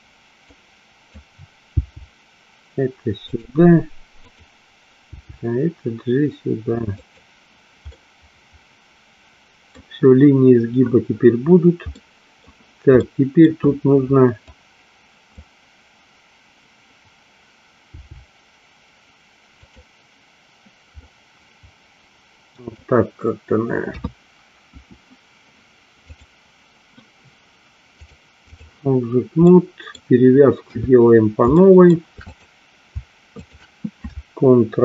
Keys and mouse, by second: 0.7 click, 1.8 g, 4.4 click, 5.1 g, 7.0 click, 8.0-9.8 middle drag, 12.0 middle click, 13.0 middle click, 14.8 click, 18.0 g, 19.7 click, 21.0-22.8 middle drag, 23.9 KP_3, 24.8 `, 28.0 click, 29.5 middle click, 30.8 KP_3, 31.7 shift+middle click, 32.3 click, 33.4 shift+click.